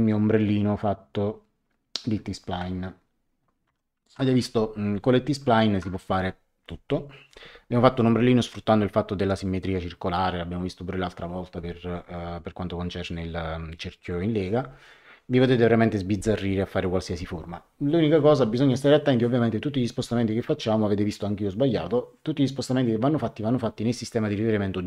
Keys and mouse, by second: 3.6 ctrl+1.